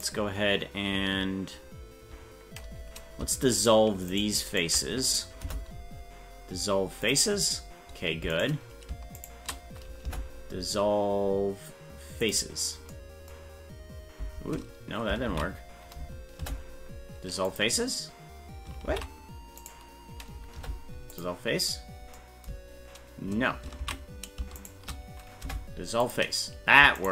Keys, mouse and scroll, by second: 3.6 shift+right click, 5.4 Delete, 8.4 right click, 9.2 shift+right click, 10.0 Delete, 15.3 ctrl+z, 16.4 Delete, 18.9 ctrl+z, 19.6 right click, 20.6 Delete, 23.8 ctrl+z, 24.7 shift+right click, 25.4 Delete, 27.0 shift+right click.